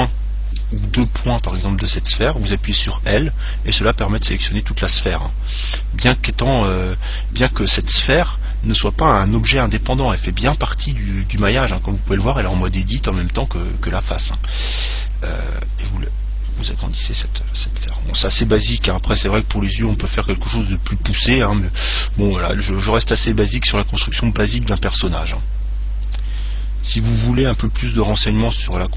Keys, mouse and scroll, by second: 3.0 l, 15.7 s, 18.9 click, 19.5-21.7 middle drag, 23.7-25.8 middle drag, 25.4 Tab, 26.3-27.7 middle drag, 27.6 Tab, 27.7-28.7 scroll up 1, 28.7 right click.